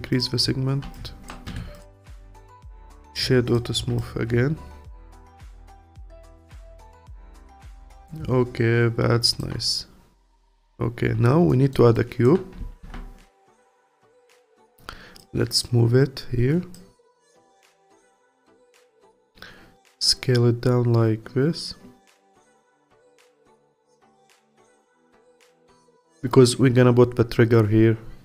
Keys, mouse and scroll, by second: 1.5 Tab, 1.7 click, 2.2 click, 2.5-3.5 right drag, 3.5 click, 3.7 scroll down 1, 4.0-6.2 alt+drag, 6.2-6.6 scroll down 2, 6.6-7.2 alt+middle drag, 7.2-10.4 alt+drag, 10.4-11.5 scroll up 3, 11.5-11.9 alt+middle drag, 11.9-12.8 alt+drag, 12.8 shift+a, 14.5 click, 15.6 click, 17.0-20.3 alt+drag, 22.3-23.4 alt+drag, 25.7-27.6 drag.